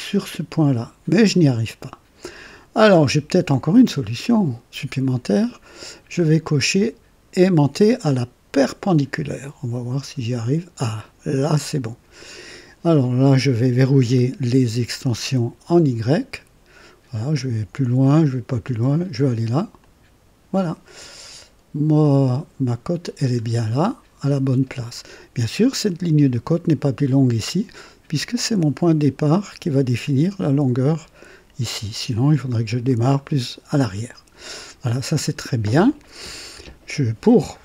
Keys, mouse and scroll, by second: 8.7 click, 11.3 click, 15.4 x, 19.7 click, 23.2-23.6 scroll down 2, 34.5 scroll down 2, 35.2-36.0 right drag.